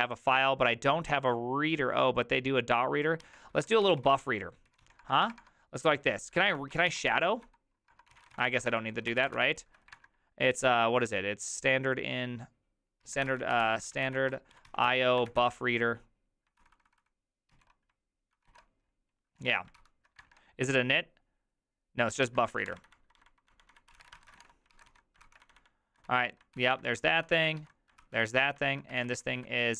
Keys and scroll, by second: 1.0 alt+{, 3.3 alt+{, 3.8 alt+", 3.8 ctrl+c, 3.9-10.5 typing, 13.1 alt+{, 13.3-15.9 typing, 16.6 ctrl+n, 16.8 ctrl+n, 16.9 ctrl+n, 17.0 ctrl+n, 17.6 ctrl+p, 18.4 ctrl+n, 18.5 ctrl+y, 19.4 Tab, 19.8 ctrl+c, 22.3 alt+{, 22.6 ctrl+}, 22.8 ctrl+c, 22.8-29.7 typing.